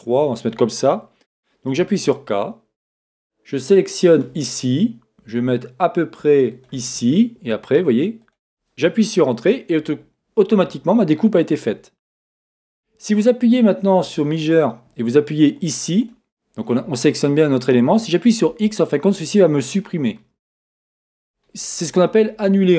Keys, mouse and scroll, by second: 1.8 k, 9.5 Return, 13.5-16.0 middle drag, 16.1-19.8 drag, 18.5 x, 19.8 middle click, 21.7 middle click.